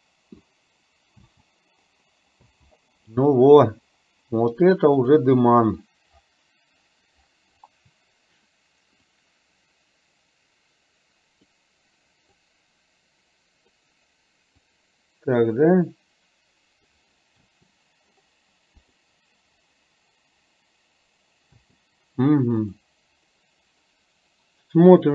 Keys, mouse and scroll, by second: 1.3 space, 2.7 space, 5.1 click, 9.1-11.5 drag, 12.3-13.7 drag, 14.6-17.0 drag, 17.5 space, 18.1 middle click, 18.8 click, 21.6 space.